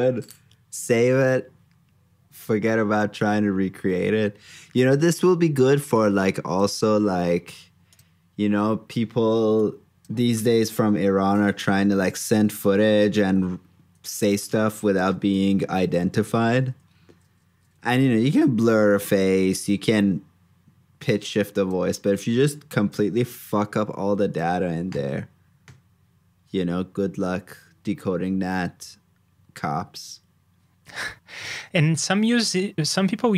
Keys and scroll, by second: 15.3 super+c, 15.9 super+s, 23.0 super+j.